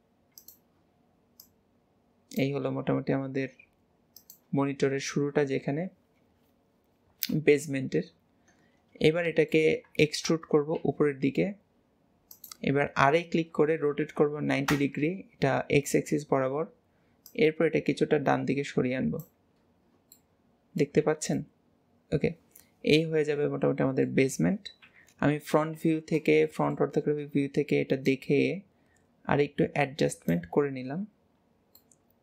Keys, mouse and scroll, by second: 1.5 click, 7.6 KP_3, 8.8-9.3 scroll up 1, 9.3 shift+middle click, 10.1 shift+middle click, 16.3-17.4 scroll up 2, 17.4 click, 19.8 scroll, 20.2 middle click, 21.1 alt+z, 21.4 middle click, 21.9-24.5 middle drag, 24.9 KP_1, 25.8 alt+z, 26.5 shift+middle click, 27.1-28.1 scroll up 1, 28.1 click, 30.9-31.6 scroll down 4, 31.9 middle click.